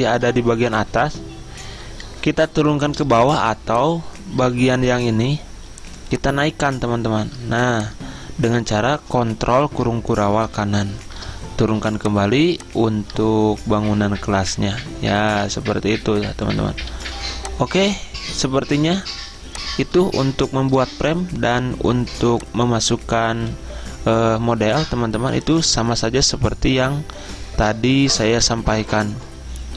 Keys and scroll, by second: 10.8 ctrl+shift+], 17.2 z.